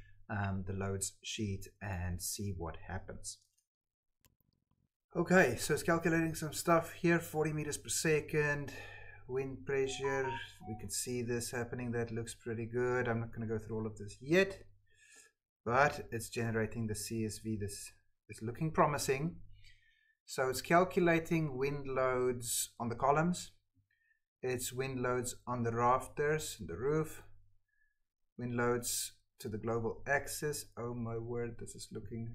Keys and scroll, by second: 3.5 Tab.